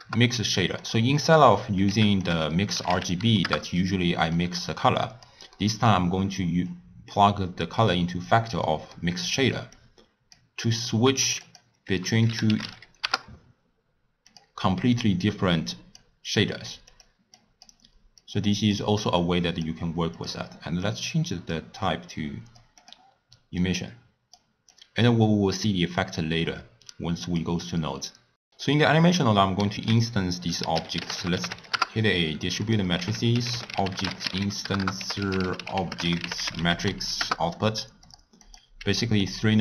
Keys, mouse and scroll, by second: 8.2-9.8 drag, 15.9-19.2 drag, 23.5 click, 25.9-28.3 drag, 29.7 ctrl+a, 33.0 ctrl+a, 34.9 ctrl+a, 38.4 drag, 38.7 g.